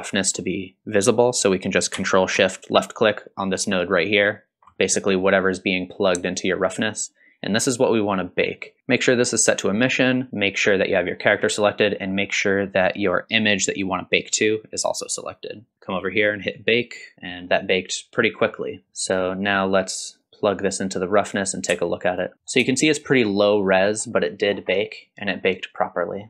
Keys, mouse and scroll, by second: 3.6 ctrl+shift+click, 10.3 click, 13.6 click, 16.5 click, 17.4-17.7 scroll up 2, 18.5-18.8 scroll up 1, 19.0 middle click, 20.2-21.3 drag, 22.1 ctrl+shift+click, 22.7 shift+middle drag, 23.3-23.9 middle drag, 24.5 scroll down 2, 24.7-26.2 middle drag.